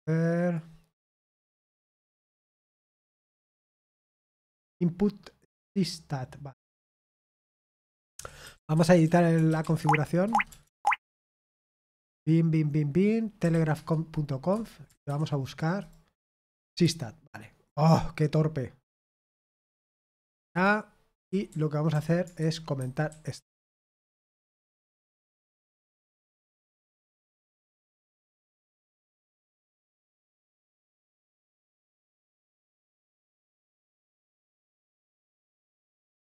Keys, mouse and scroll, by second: 0.4 click, 1.3-5.3 scroll down 1, 5.3-7.6 drag, 8.4-10.6 typing, 10.2 Tab, 10.7 Tab, 11.0 Tab, 23.0-26.2 typing, 26.2 Escape, 28.6 ctrl+d, 29.1 ctrl+d, 29.9-31.6 typing, 33.6 j.